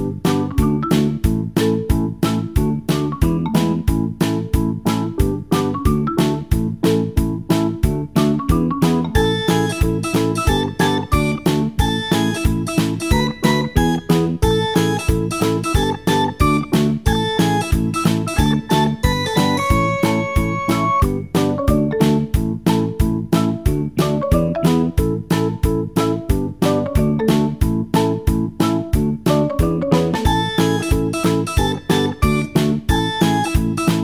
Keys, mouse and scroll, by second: 18.7-26.1 drag, 26.1-26.9 scroll down 1, 26.9-31.7 middle drag, 31.7 click, 33.6 shift+a.